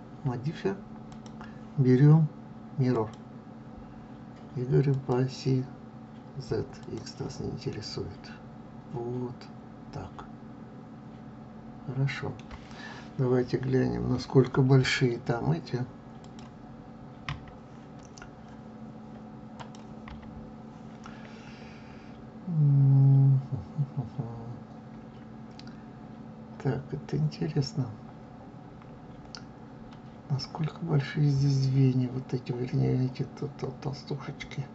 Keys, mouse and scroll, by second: 1.0-5.0 drag, 6.7 click, 7.6-10.6 middle drag, 14.7 KP_3, 19.5 click, 20.0 KP_3, 29.8 scroll down 5.